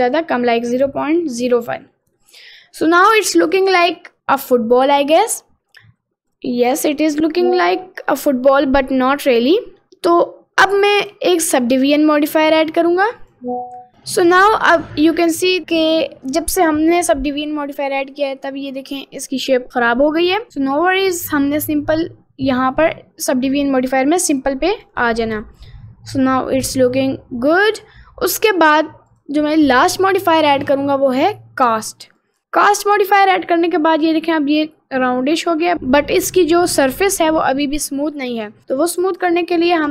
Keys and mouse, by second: 0.9 click, 1.7 middle click, 2.2 middle click, 2.7 middle click, 3.1 middle click, 3.5 middle click, 4.2-5.5 middle drag, 6.6 middle click, 7.7 middle click, 8.3 middle click, 8.9 middle click, 9.6 middle click, 10.1 middle click, 11.1-13.4 drag, 14.4 middle click, 15.0 middle click, 17.8 middle click, 18.2-20.5 middle drag, 20.6 middle click, 24.7 click, 25.7 middle click, 26.3-27.7 middle drag, 29.1 click, 29.6-32.3 drag, 32.4-35.2 middle drag, 35.6 middle click, 37.4 middle click, 37.8 middle click, 38.6 middle click, 39.1-39.9 right drag.